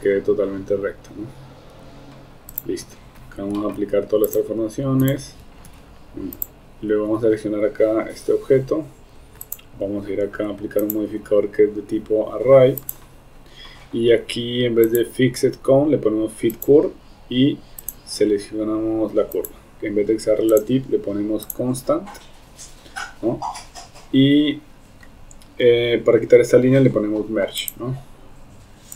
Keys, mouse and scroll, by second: 2.9 Tab, 3.8 ctrl+a, 11.0-13.0 drag, 15.0-16.7 drag, 20.5 click, 21.5 click, 27.6 click.